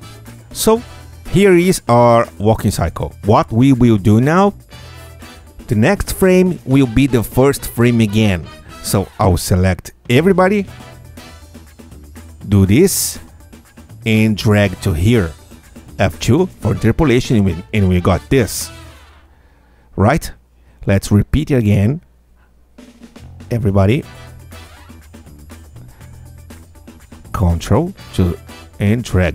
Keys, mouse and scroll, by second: 0.1 space, 1.0 click, 1.6 Tab, 2.1 ctrl+a, 5.6 F8, 6.6 Tab, 9.9 ctrl+Tab, 10.3 ctrl+a, 11.5-13.7 ctrl+drag, 14.5-16.5 alt+drag, 17.2 F2, 17.7-18.9 drag, 18.7 Tab, 18.9 space, 21.0 space, 23.0 Tab, 24.4 ctrl+a, 26.1-28.7 ctrl+alt+drag.